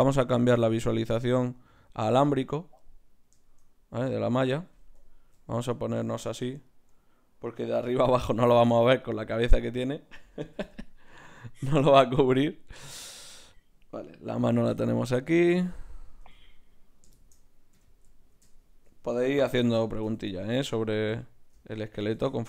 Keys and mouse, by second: 2.5-5.3 right drag, 7.7 g, 9.6-11.7 right drag, 10.5 g, 13.5-15.4 right drag, 14.4 g, 15.8 right click, 16.2 g, 17.1 click, 17.7 KP_1, 19.5 KP_3, 21.1 KP_1.